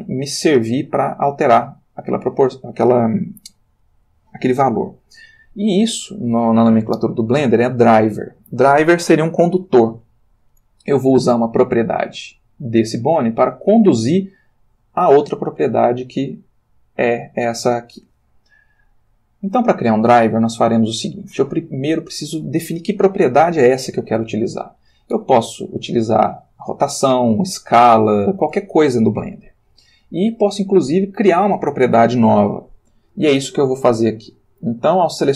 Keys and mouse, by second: 11.8 r, 13.1 Escape, 14.5 click, 25.7 click, 26.6 r, 27.1 Escape, 35.0 r.